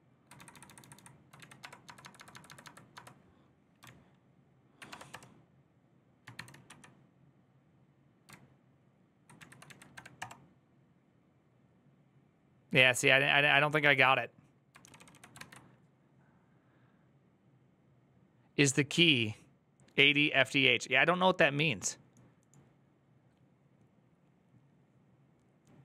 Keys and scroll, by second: 0.0-1.9 typing, 1.1 ctrl+Left, 1.1 Right, 3.6-4.6 ctrl+Right, 3.6 BackSpace, 4.6 Right, 4.7 BackSpace, 4.9 Return, 6.1 :, 6.4 Up, 8.1 ctrl+Left, 8.7-9.2 ctrl+Left, 9.2 ctrl+Right, 9.7 =, 10.0 Return, 14.6 ctrl+d, 14.7 ctrl+d, 14.9 ctrl+d, 15.2 alt++.